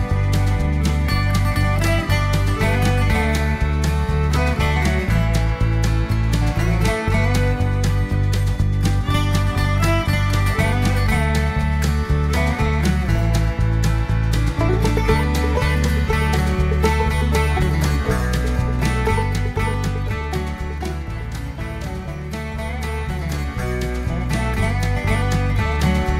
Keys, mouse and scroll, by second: 1.6 BackSpace, 3.2-5.3 typing, 6.3 click, 6.8 click, 9.1 click, 14.1 click, 15.2 click, 15.6 click, 16.9 0, 17.5 scroll down 1, 18.0 scroll up 1, 21.0 click, 22.2 click, 23.6 click, 25.4 click.